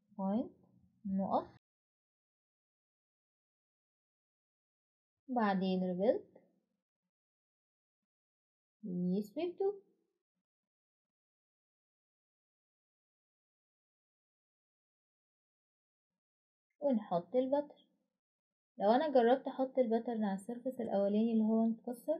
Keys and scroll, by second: 4.4 typing, 7.8-8.6 typing, 16.1 typing.